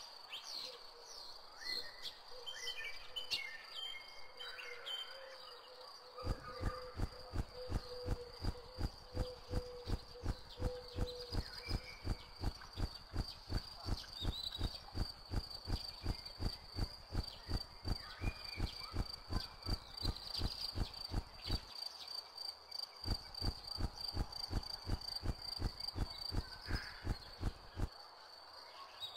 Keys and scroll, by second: 1.5 c, 3.1 w, 6.1 space, 6.8 w, 11.3 m, 12.4 d, 14.9 a, 16.9 d, 21.6 h, 22.4 w, 26.4 m, 27.8 h, 28.5 w.